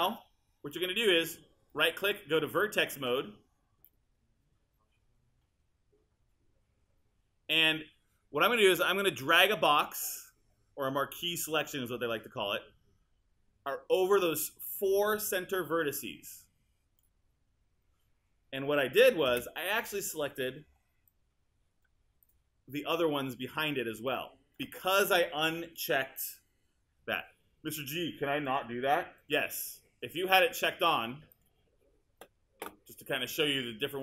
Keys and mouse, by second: 1.7 right click, 19.3 space.